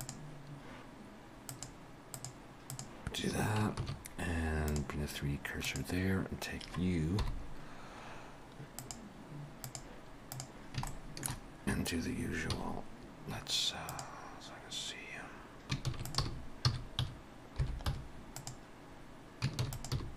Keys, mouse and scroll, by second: 0.0 click, 3.6 click, 3.8 shift+s, 5.7 click, 7.1 KP_7, 8.8 click, 10.9 shift+middle click, 12.6 z, 15.9 shift+d, 16.2 r, 19.6 shift+d, 19.9 r.